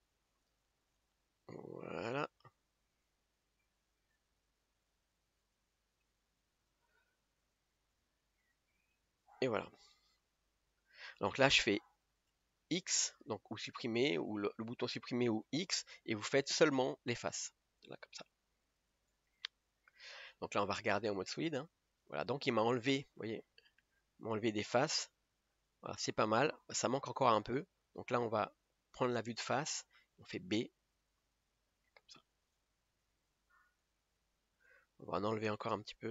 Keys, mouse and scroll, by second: 6.7 b, 9.3 b, 10.3 scroll down 2, 21.3 click, 22.0-22.9 scroll up 1, 22.9 scroll up 1, 24.0-27.4 shift+middle drag, 27.4 KP_3, 32.6 b, 34.7 b.